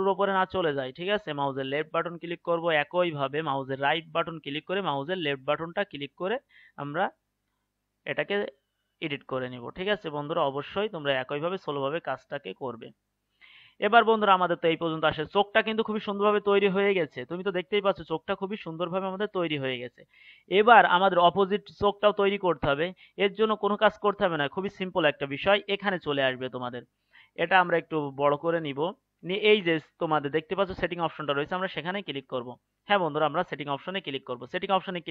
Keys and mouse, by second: 2.5-7.8 right drag, 9.6-13.5 right drag, 13.5-25.5 middle drag, 25.5-35.1 right drag.